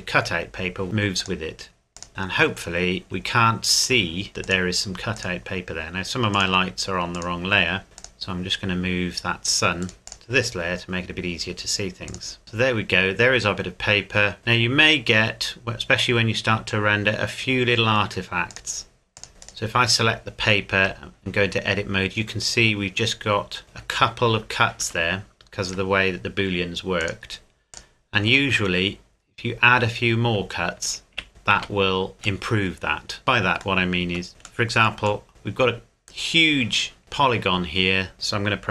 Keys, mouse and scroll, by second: 0.3 scroll up 1, 1.2 click, 2.1 middle click, 3.0 scroll up 1, 4.4 click, 7.5-8.0 scroll down 1, 8.0 click, 8.4-9.1 scroll down 1, 9.1-9.8 scroll up 1, 9.8 right click, 10.0 m, 10.6-11.1 scroll up 1, 12.1 click, 12.4 scroll up 1, 14.4-14.8 scroll down 1, 18.5 click, 19.3 scroll down 1, 19.4 right click, 20.7 Tab, 24.8 Tab, 27.0 click, 28.4 Tab, 29.2 scroll up 1, 30.0-31.1 scroll down 1, 31.1 z, 31.6 a, 32.0-32.4 scroll down 1, 32.4 middle click, 33.2 scroll up 1, 33.8 shift+middle click, 34.2-35.3 scroll down 1, 35.3 shift+middle click, 35.5 scroll down 1, 35.6 scroll up 1, 35.7 scroll down 1, 37.0 shift+middle click, 38.0-38.7 scroll up 1.